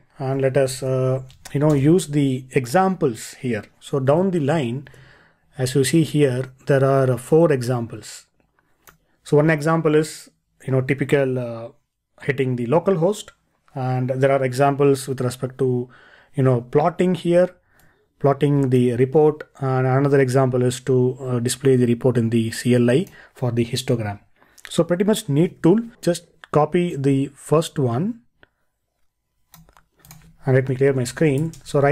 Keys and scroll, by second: 0.7 ctrl+l, 4.9 ctrl+e, 31.0 ctrl+l.